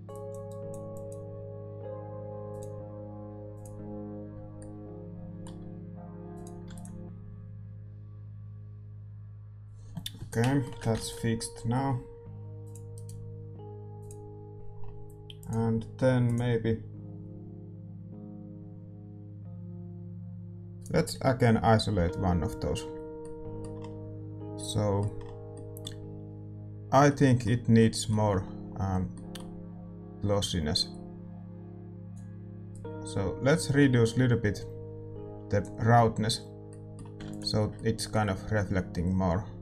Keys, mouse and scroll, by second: 8.2 ctrl+s, 11.0-12.5 right drag, 30.5-31.7 right drag.